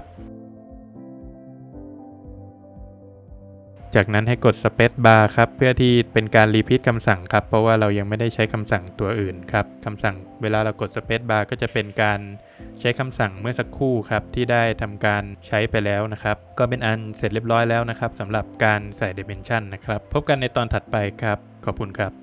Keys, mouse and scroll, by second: 0.2 click, 2.9 click, 3.6 space, 5.5 click, 9.7 click, 9.7 scroll down 2, 10.1 middle click, 10.5 Escape, 11.0 scroll down 1, 11.4 middle click, 11.9-12.3 scroll down 3, 12.3 middle click, 13.2 scroll up 1, 14.4 Escape, 14.5 scroll down 1, 14.8 middle click.